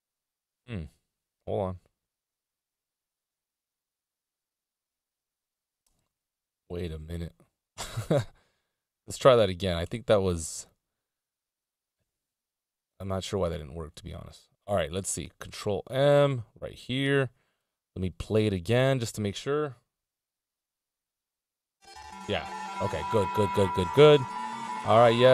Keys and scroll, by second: 3.9 space, 7.1 BackSpace, 8.2 Down, 9.2 Up, 9.7 Down, 10.3 BackSpace, 11.7 Return, 17.8 ctrl+m.